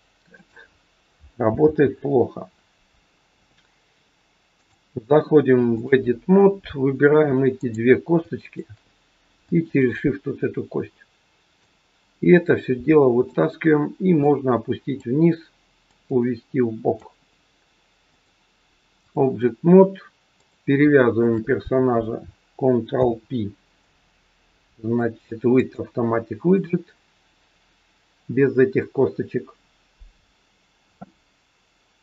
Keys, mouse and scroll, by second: 1.6 ctrl+z, 4.6 click, 6.2-7.4 scroll down 1, 8.4 shift+click, 11.6 click, 14.2 click, 18.0 click, 20.4 click, 21.0 shift+click, 22.8 ctrl+p.